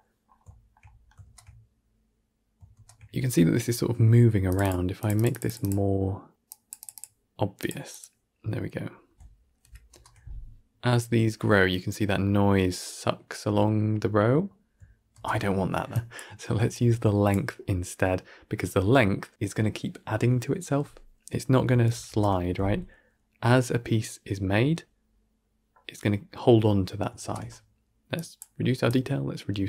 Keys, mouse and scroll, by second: 0.1 scroll up 3, 0.4-1.1 shift+middle drag, 1.1 shift+space, 2.7 shift+space, 4.4 click, 5.0-9.5 drag, 9.5 shift+Left, 9.8 shift+space, 14.4 scroll down 1, 15.0 shift+space, 15.2-16.3 middle drag, 16.3-17.2 drag, 21.8 shift+Left, 21.9 shift+space, 27.1 shift+space, 28.1-29.6 drag.